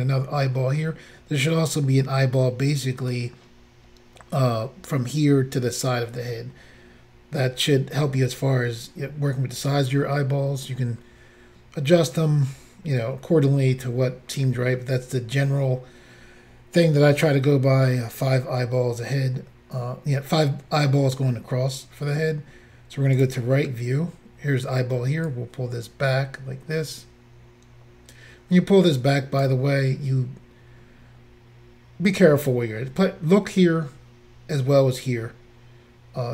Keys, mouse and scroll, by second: 23.1 click, 23.2 click, 25.2 click.